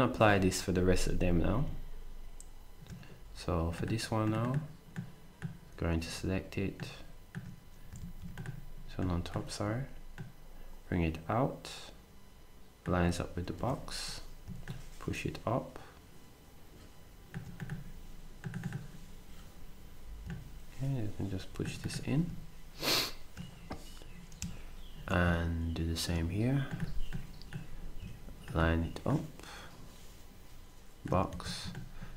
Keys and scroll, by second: 8.0 ctrl+z, 13.6 s, 31.3 s.